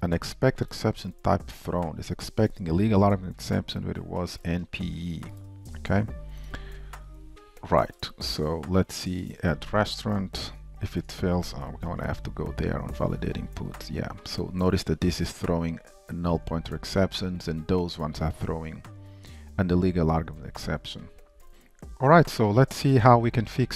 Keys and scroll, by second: 12.9 ctrl+shift+i, 12.9 alt+space, 14.6 super+b.